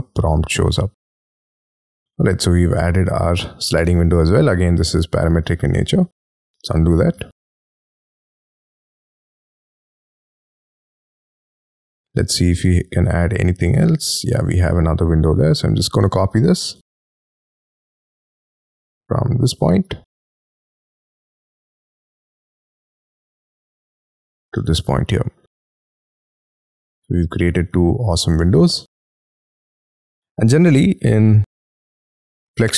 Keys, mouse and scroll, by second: 1.9 middle click, 3.0 scroll down 4, 3.4-3.8 scroll up 4, 3.9 m, 5.6 ctrl+z, 6.1 scroll down 6, 6.3 space, 7.1 y, 7.7 shift+middle click, 8.4 u, 8.7 y, 9.0 scroll up 5, 9.7 y, 10.2 middle click, 11.7 scroll down 5, 12.1 scroll up 5, 12.5 middle click, 14.6-15.0 scroll down 7, 15.5 m, 15.7-16.7 scroll up 14, 17.9-18.2 scroll up 5, 18.2 middle click, 19.6-20.9 scroll down 32, 21.1 scroll up 6, 21.5 middle click, 22.2 scroll down 1, 23.5 shift+click, 23.8-24.3 scroll down 5, 24.0 space, 24.5 middle click, 25.6 y, 25.9 middle click, 27.7 y, 28.3 scroll down 6, 28.7 middle click, 30.1 y, 30.4-30.8 scroll up 6, 30.8-31.3 scroll down 12, 32.5-32.7 scroll up 10.